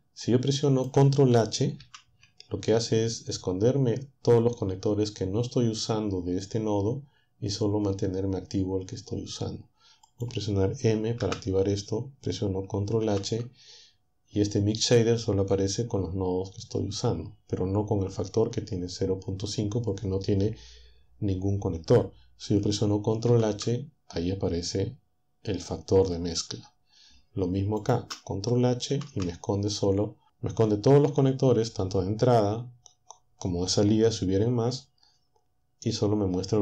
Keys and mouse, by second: 1.8 ctrl+h, 10.1 click, 11.2 m, 13.0 ctrl+h, 23.3 ctrl+h, 27.8 click, 28.9 ctrl+h.